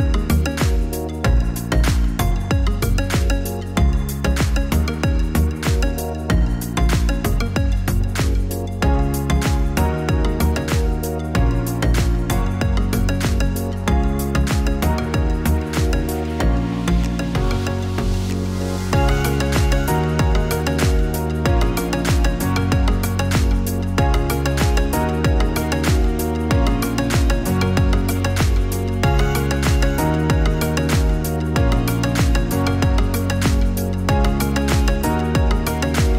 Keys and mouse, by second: 5.9-11.5 drag, 15.3-16.4 drag, 18.8 click, 24.3 click.